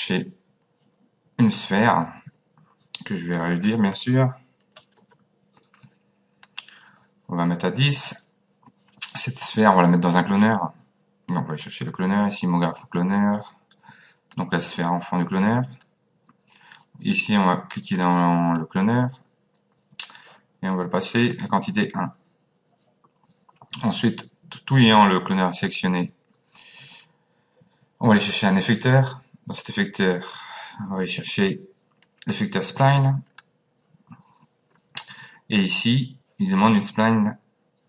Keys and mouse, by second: 3.3 click, 4.7 KP_1, 4.9 KP_0, 6.4 click, 10.2 click, 14.3 click, 17.9 click, 21.3 click, 28.9 click.